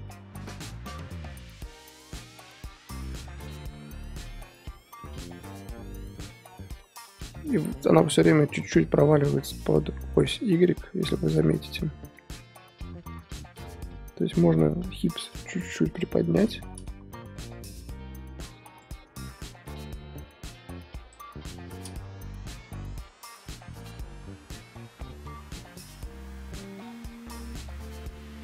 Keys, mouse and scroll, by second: 13.9-14.5 scroll up 1, 14.5-15.4 middle drag, 15.4 click, 15.9 KP_3, 16.6-17.2 scroll up 2, 17.2 g, 18.7 click, 21.5 i, 22.6-28.4 drag.